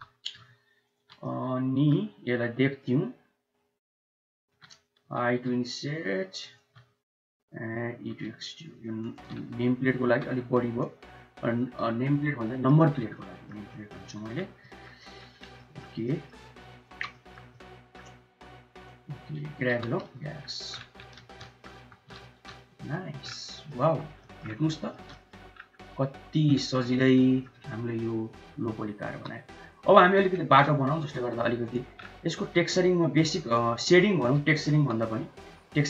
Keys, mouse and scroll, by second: 1.1 middle click, 2.7-4.4 shift+drag, 5.0 i, 8.2 e, 9.9 1, 10.7 click, 11.5 middle click, 12.4 shift+middle click, 13.1 click, 13.6 shift+middle click, 14.5 click, 14.9 shift+middle click, 15.5 middle click, 15.9 shift+middle click, 16.7 shift+middle click, 17.5 shift+middle click, 18.6 shift+middle click, 19.6 g, 21.0 shift+z, 21.2 click, 21.6 Tab, 22.0 shift+z, 22.6 Tab, 23.3 click, 23.7 Tab, 24.1 click, 24.6 shift+click, 25.0 drag, 25.7-26.3 middle drag, 26.9 middle click, 27.9 middle click, 29.0 n, 29.8 middle click, 30.3 shift+a, 32.3 s, 34.1 s.